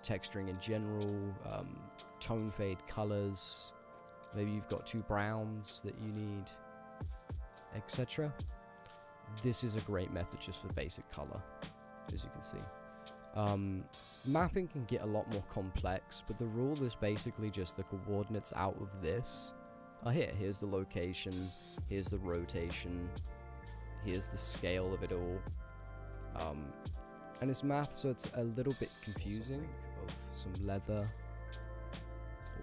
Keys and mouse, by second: 2.6 shift+click, 3.9 click, 8.7 middle click, 9.8 click, 10.0 g, 10.2 click, 10.4 g, 11.3 middle drag, 12.2 click, 12.5 g, 13.2 g, 13.7 middle click, 13.8 click, 15.2 click, 15.3 g, 15.7 g, 17.2 middle click, 17.7 click, 19.0 middle click, 20.2 click, 21.2 ctrl+z, 21.6-23.8 drag, 24.0 ctrl+z, 24.5-25.8 drag, 26.0 ctrl+z, 26.9 click, 27.6 click, 27.7 g, 28.3 click, 28.5 g, 29.2 middle click, 30.1 x, 30.3-31.6 drag, 32.0 shift+a.